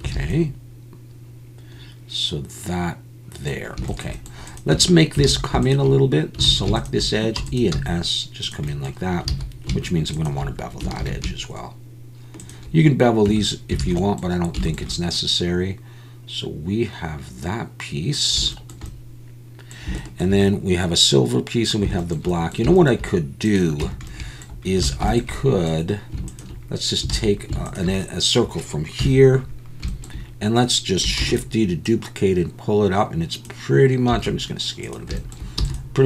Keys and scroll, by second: 0.1 alt+a, 4.7 Tab, 5.3 alt+a, 6.5 alt+a, 7.4 e, 7.7 s, 9.4 alt+a, 11.0 ctrl+b, 13.3 Tab, 13.8 alt+a, 23.8 Tab, 24.9 alt+a, 27.1 alt+a, 29.0 KP_1, 31.2 shift+d, 34.1 s, 35.6 e.